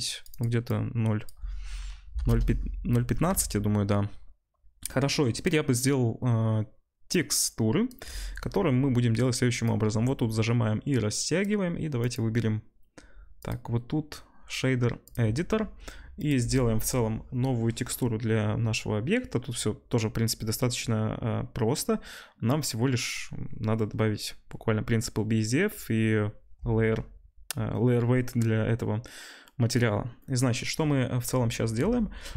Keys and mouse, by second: 3.4 ctrl+s.